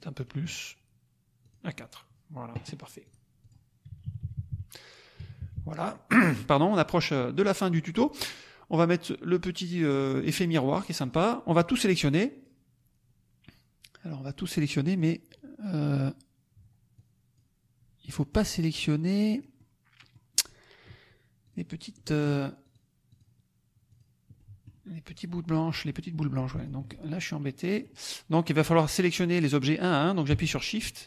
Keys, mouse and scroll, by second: 0.2 right click, 1.4 click, 3.0 click, 3.4 click, 3.9 KP_Subtract, 5.3 KP_Subtract, 6.7 middle click, 7.0 click, 7.6 click, 10.9 click, 11.5-12.6 drag, 14.8 click, 16.9 click, 18.3 click, 19.3 click, 21.5 click, 21.9 middle click, 22.6 click, 23.0 click, 24.0 click, 24.4 middle click, 26.5 shift+click, 27.4 middle click, 30.7 shift+click.